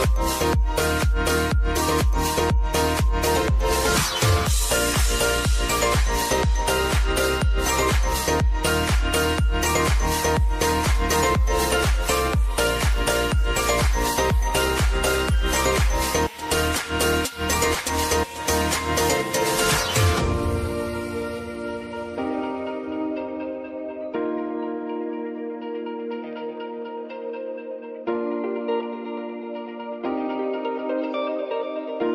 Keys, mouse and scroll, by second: 1.3 click, 2.2 space, 4.4 click, 5.4-6.0 scroll up 1, 7.6 click, 12.8 space, 14.0-16.0 drag, 16.0 space, 17.9 click, 18.5 scroll up 1, 19.5 click, 23.5 click, 24.5 space, 26.1-28.0 drag, 28.0 space, 29.5 click, 29.8 space, 32.0 click.